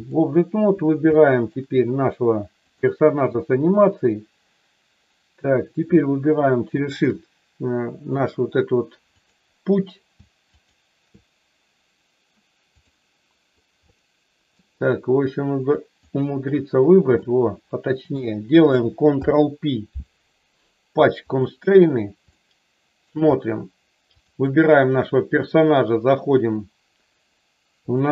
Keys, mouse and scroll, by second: 1.3 shift+middle click, 2.6 click, 6.6 shift+click, 9.1 click, 10.5 shift+click, 12.7 click, 13.9-14.6 shift+middle drag, 15.9 shift+click, 17.1-18.1 shift+middle drag, 19.0 ctrl+p, 22.4-23.0 shift+middle drag, 24.0 click.